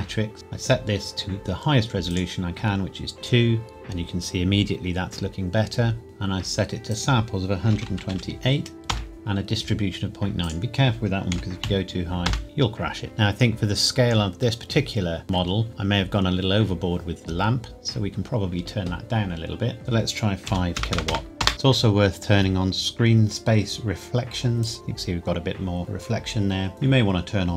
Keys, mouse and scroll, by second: 2.1 click, 5.1-6.0 scroll up 1, 6.9 click, 7.7 KP_1, 7.9 KP_2, 8.1 KP_8, 8.9 KP_Enter, 10.4 click, 11.3 KP_Decimal, 11.6 KP_9, 12.3 KP_Enter, 19.8 click, 20.5 KP_5, 20.7 KP_0, 21.4 KP_Enter, 21.5 click, 24.6 click.